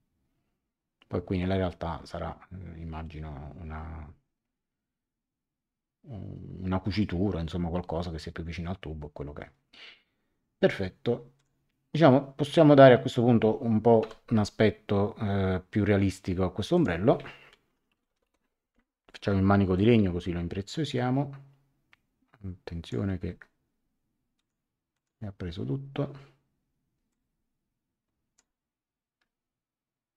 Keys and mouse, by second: 11.3 click, 14.0 a, 16.7 click, 17.6-18.7 typing, 19.7 click, 24.3 click, 27.1 click.